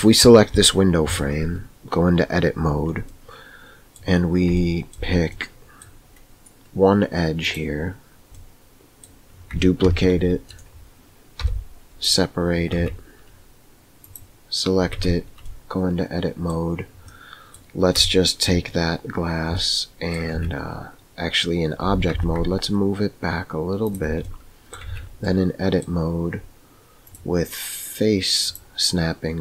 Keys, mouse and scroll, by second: 1.0 Tab, 3.0 middle click, 4.6 shift+middle click, 5.4 middle click, 8.3 middle click, 9.8 shift+d, 11.3 p, 12.7 Tab, 14.9 Tab, 15.5 middle click, 17.0 middle click, 18.1 shift+middle click, 19.6 middle click, 20.3 Tab, 21.8 g, 24.3 middle click, 24.9 Tab, 25.3 middle click, 27.1-28.9 drag.